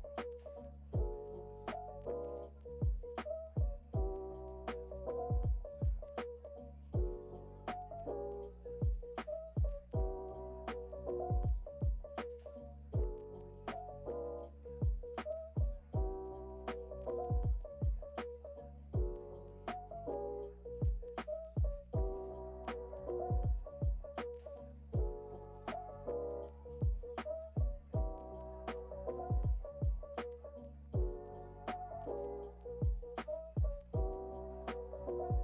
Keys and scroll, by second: 2.0 super+s, 3.6 super+d, 14.5 super+], 20.8 BackSpace, 24.2 x, 25.9 o, 27.9 o, 33.3 BackSpace, 34.5 Delete.